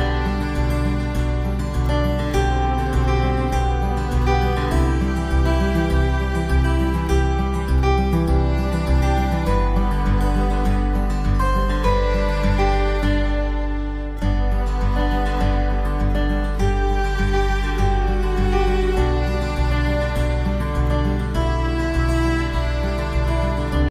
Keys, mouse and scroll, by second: 1.4 middle click, 2.5-2.9 scroll up 2, 2.9 middle click, 5.7 ctrl+s, 6.4 middle click, 7.9 scroll down 2, 8.2 middle click, 10.3 KP_0, 11.1-11.4 scroll down 3, 12.4 right click, 13.4 g, 16.4 g, 17.9-18.8 scroll up 5, 21.2 click, 21.9 click.